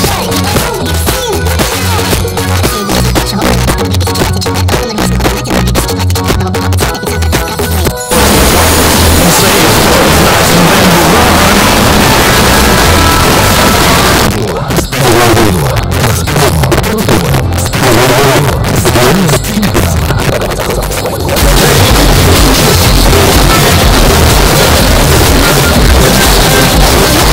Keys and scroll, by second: 0.2 Down, 0.3 Down, 0.5 Return, 14.1 Page_Down.